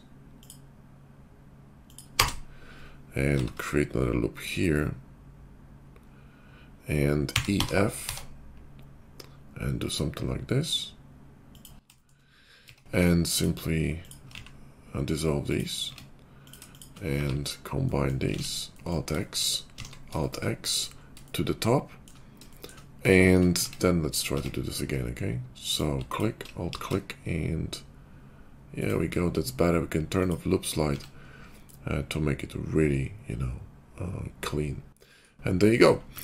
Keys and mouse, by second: 3.3 ctrl+r, 7.2-10.9 drag, 12.0 shift+middle click, 12.5 Tab, 13.2 click, 15.7 x, 15.8 Tab, 16.7 shift+click, 17.1 1, 18.3 alt+x, 19.0 shift+middle click, 19.7 alt+x, 20.2-22.9 shift+middle drag, 23.6 Tab, 24.2 Tab, 25.6 click, 26.1 alt+click, 26.6 ctrl+b, 26.9-29.0 shift+middle drag, 30.1 click, 30.9 Tab, 30.9-36.2 middle drag.